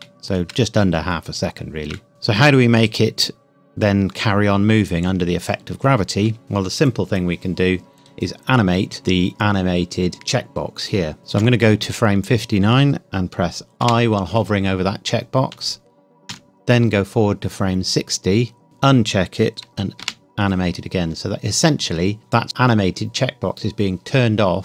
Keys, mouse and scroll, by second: 0.3 shift+middle click, 2.1 click, 11.4 Left, 13.8 |, 18.6 click, 20.0 |.